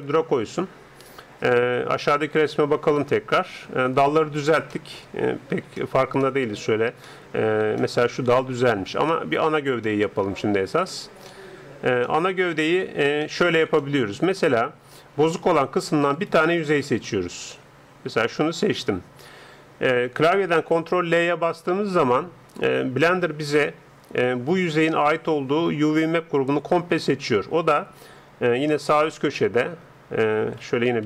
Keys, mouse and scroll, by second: 0.0 ctrl+Up, 2.4-16.1 middle drag, 16.1-20.0 right drag, 17.2-20.0 middle drag, 20.6 ctrl+l, 23.2-25.0 middle drag.